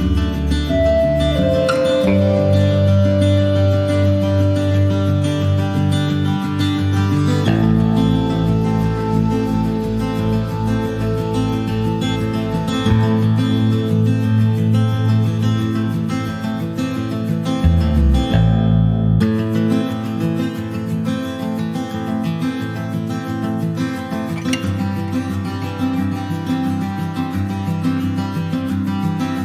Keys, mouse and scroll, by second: 0.0 click, 0.7 click, 1.2 click, 1.9 click, 3.6 click, 4.4 click, 5.8 click, 6.8 click, 7.3 alt+z, 7.5 scroll down 2, 7.7 middle click, 7.9 scroll up 1, 8.0 Tab, 8.1 click, 8.6 scroll up 1, 8.9 ctrl+z, 10.2 click, 10.4 ctrl+a, 11.4 middle click, 11.8 click, 13.7 click, 14.0 click, 14.3 ctrl+a, 16.0 click, 16.4 click, 16.7-18.1 right drag, 18.1 middle click, 18.4 click, 19.3 click, 20.1 alt+middle click, 21.5 alt+middle click, 21.9 alt+scroll down 2, 22.1 alt+middle click, 23.0 shift+middle click, 23.5 click, 24.7 scroll up 1, 25.2-26.7 shift+middle drag, 26.7 click, 28.0 alt+middle click.